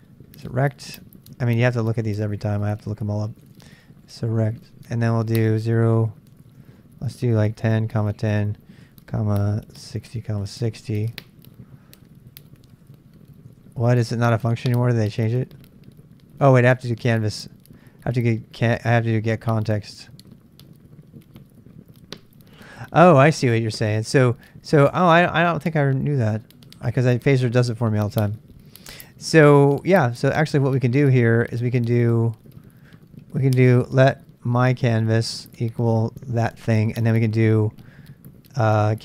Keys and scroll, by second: 0.0-0.9 typing, 3.2-11.0 typing, 13.3-14.0 typing, 25.4 super+Tab, 28.8-31.0 Left, 31.0 Up, 31.5 Up, 35.3 Return, 38.6-39.0 typing.